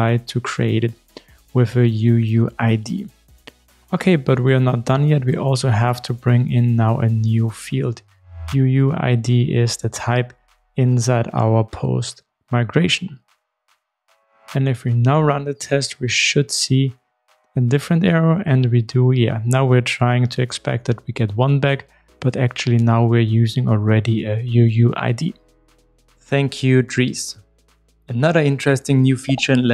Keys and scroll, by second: 6.7 shift+super+F12, 8.0 super+e, 11.8 super+x, 15.2 super+/, 15.3 super+e, 18.4 ctrl+shift+r.